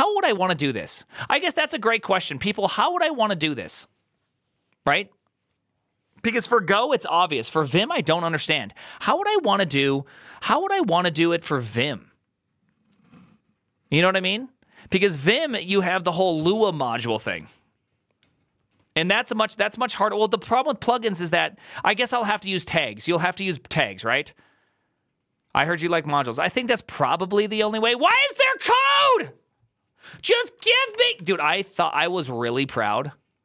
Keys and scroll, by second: 30.4-31.2 typing.